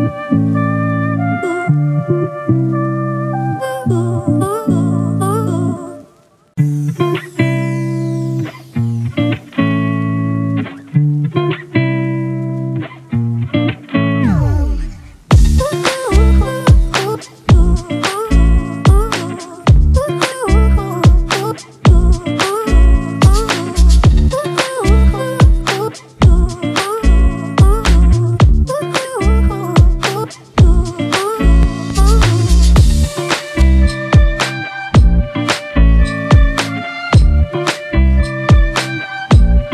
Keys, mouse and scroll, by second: 7.5 ctrl+t, 8.4 alt+shift+click, 10.7 alt+s, 11.2 alt+shift+click, 14.7 alt+shift+click, 16.6 alt+shift+click, 18.9 Return, 23.1 double click, 29.9-30.8 typing, 31.1 double click.